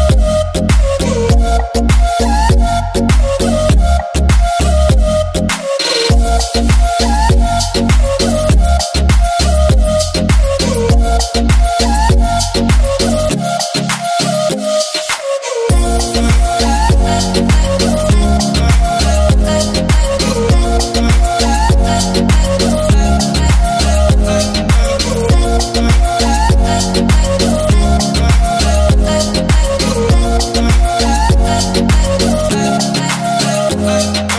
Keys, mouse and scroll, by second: 0.0 shift+scroll up 1, 0.1 shift+middle click, 0.5 alt+a, 1.1 a, 1.6-2.0 shift+middle drag, 2.0 scroll down 1, 2.7 click, 3.2 shift+middle drag, 3.4 scroll up 1, 3.9 g, 5.0 click, 5.3 alt+a, 5.4 scroll down 1, 5.5-6.6 middle drag, 6.6 KP_1, 7.1 KP_3, 8.2-8.7 shift+middle drag, 8.7 ctrl+s, 9.4 ctrl+KP_1, 10.6 ctrl+KP_3, 11.5 alt+a, 11.7 ctrl+s, 12.0 scroll down 2, 12.1 shift+middle drag, 12.4 a, 12.9-13.3 scroll down 2, 13.3-13.9 scroll up 2, 13.9 alt+d, 16.5 click, 16.7 r, 18.6 KP_Enter, 19.3-20.3 shift+middle drag, 20.3 alt+d, 22.2 click, 22.5 r, 23.6 KP_Enter, 24.1 scroll down 2, 24.2-26.4 shift+middle drag, 26.4 alt+d, 27.7 click, 27.9 r, 28.7 KP_Enter, 30.4 click, 33.0 alt+d.